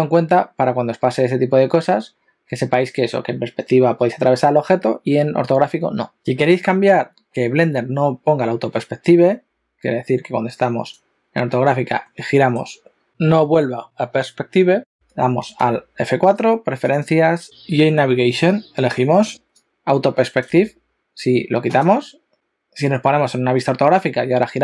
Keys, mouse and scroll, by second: 7.1-10.1 scroll down 1, 11.0 click, 12.0 middle click, 15.7 F4.